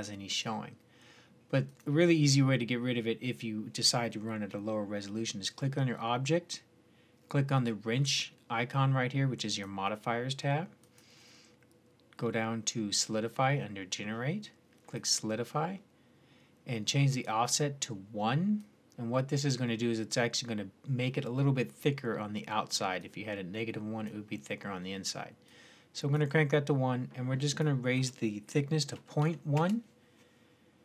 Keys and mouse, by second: 1.5-5.9 drag, 9.3-12.6 drag, 18.4-24.8 drag, 25.3-27.1 drag, 27.3-30.8 drag.